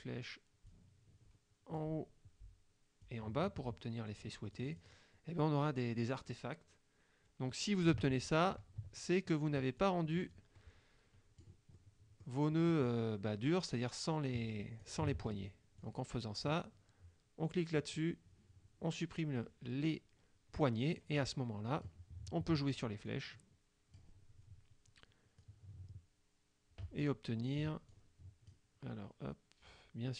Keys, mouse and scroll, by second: 0.7-2.0 drag, 3.1-4.5 drag, 4.6 click, 8.2 ctrl+z, 9.4 ctrl+click, 10.4-11.7 drag, 11.8 click, 12.5 scroll up 2, 14.2 click, 15.2 ctrl+z, 15.9 click, 17.9 click, 21.0 click, 23.1 click, 25.4-27.3 drag, 27.9 click.